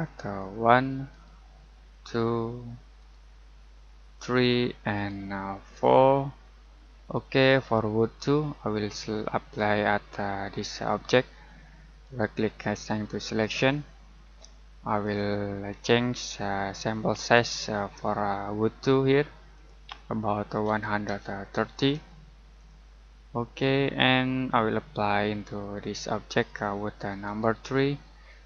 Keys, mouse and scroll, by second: 0.3 click, 1.1 right click, 1.9 click, 2.9 right click, 4.1 click, 4.9 right click, 5.9 click, 10.6 click, 12.0 right click, 13.2 click, 20.6-21.7 typing, 22.5 click, 25.8 click, 27.2 right click.